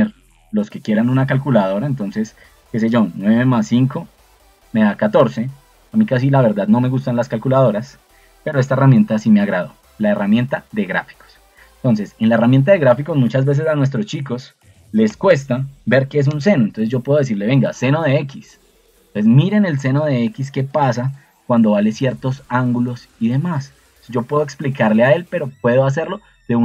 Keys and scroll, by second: 13.7-16.4 typing.